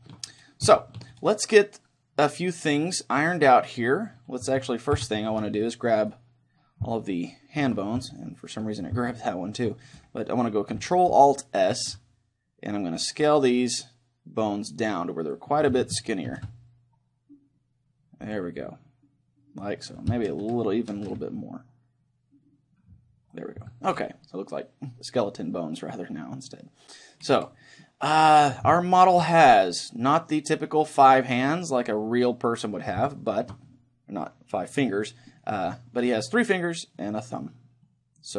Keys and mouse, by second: 4.5 a, 5.0 c, 6.1-10.1 right drag, 7.1-8.5 middle drag, 9.5 click, 9.5-11.4 middle drag, 11.7 ctrl+alt+s, 15.3-18.3 drag, 16.3 ctrl+alt+s, 18.3 click, 18.7 middle click, 19.6 click, 19.6-20.6 middle drag, 21.0 ctrl+alt+s, 23.5-25.3 drag, 23.9 a, 25.1 middle click, 27.9-30.8 middle drag, 31.5-33.1 middle drag, 33.2-35.6 middle drag, 35.8-38.3 middle drag.